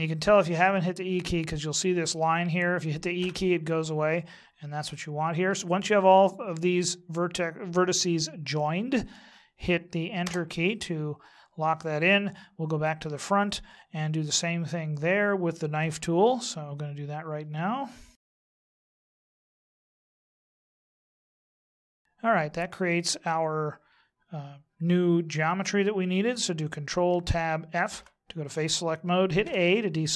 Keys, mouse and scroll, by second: 13.0 KP_1, 15.8 k, 27.1 ctrl+Tab, 29.4 a.